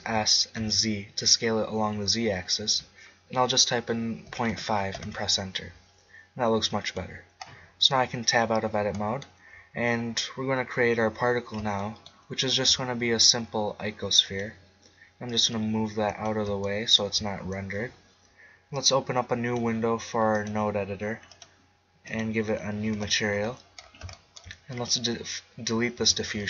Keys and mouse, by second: 0.0 s, 7.0 middle click, 7.8 Tab, 8.4 middle click, 12.5 shift+a, 15.3-17.1 drag, 18.7-21.8 drag, 22.4-23.8 drag, 22.9 n, 24.7-26.0 right drag, 26.0 x.